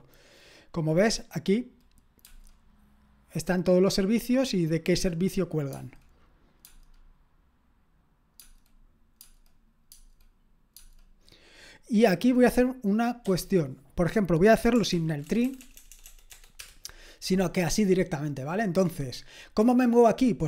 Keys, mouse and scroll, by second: 9.9-10.7 typing, 13.2 q, 14.9 ctrl+p, 15.3-16.3 typing, 16.6 Return.